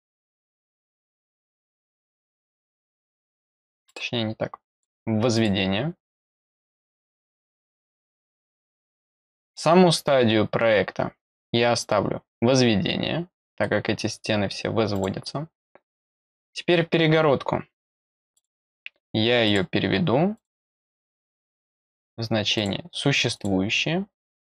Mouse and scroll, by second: 3.8 click, 4.7 click, 5.3 click, 7.6 click, 9.0-13.6 scroll down 1, 13.6 middle click, 14.9 click, 18.3 click, 19.4 click, 20.3 click, 22.5 click, 23.3 click.